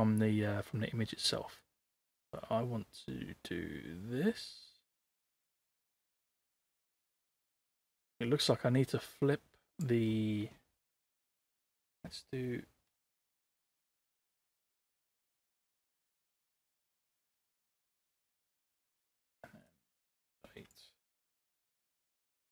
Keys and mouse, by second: 1.6-9.9 drag, 12.0 ctrl+c, 14.1 ctrl+c, 14.7 ctrl+v, 15.7 ctrl+c, 16.1 ctrl+v, 16.7 ctrl+c, 17.1 ctrl+v, 19.7-20.7 drag, 21.4 ctrl+z, 21.8 click.